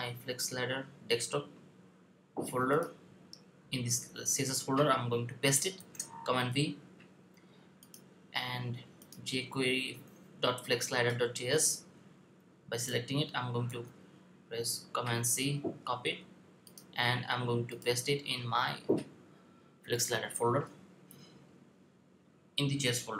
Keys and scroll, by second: 5.6 super+v, 13.4 super+c.